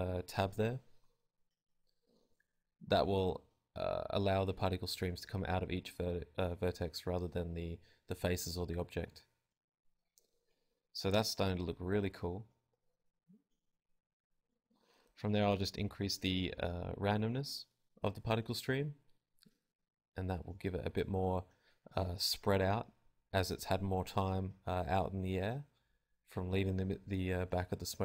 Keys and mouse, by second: 0.5 alt+a, 2.4 click, 4.4 alt+a, 7.0 alt+a, 9.3 alt+a, 10.2-13.7 drag, 18.2 click, 18.3 alt+a, 21.4 click, 22.7 alt+a, 23.3 click, 23.7 alt+a, 24.2 alt+a, 25.0 click, 25.2 alt+a.